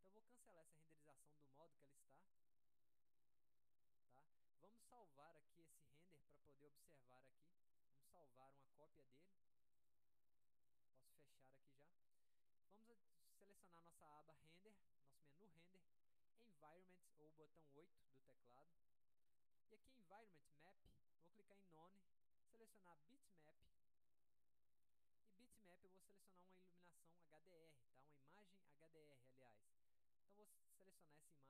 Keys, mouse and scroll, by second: 7.8 click, 8.9 click, 9.9 click, 10.7 click, 11.6 click, 14.6 click, 18.4 click, 19.5-19.9 drag, 21.9 click, 23.7 click, 25.5 click, 28.4 click, 30.0 click.